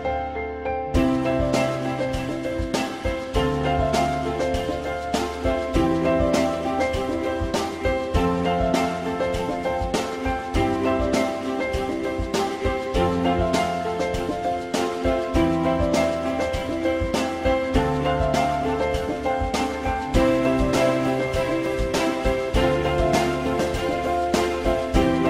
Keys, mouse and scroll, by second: 2.4 alt+middle click, 9.0 F4, 10.4 alt+middle click, 13.9 i, 14.5 z, 18.6 w.